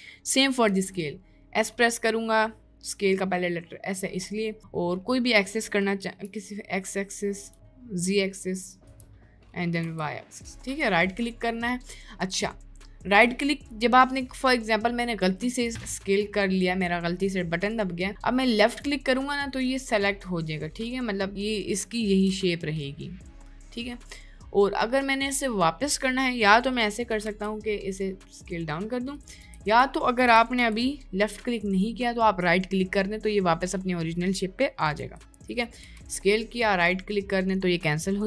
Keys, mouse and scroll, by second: 0.7 s, 19.4-22.9 middle drag, 23.3-24.5 middle drag, 27.1 s, 29.5 ctrl+z, 30.5 s, 35.0 s, 35.9 s.